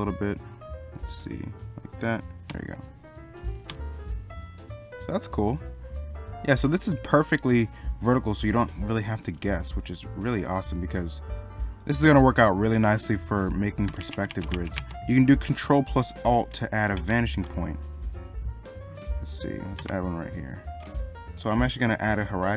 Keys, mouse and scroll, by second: 7.8 middle click, 14.9 middle click, 19.0 middle click.